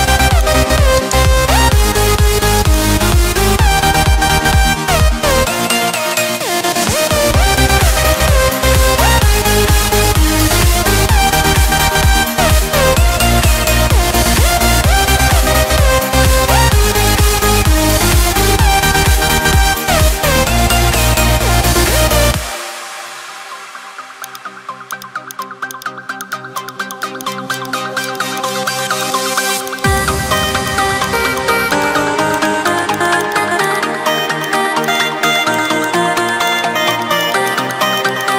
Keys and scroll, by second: 23.6 ctrl+z.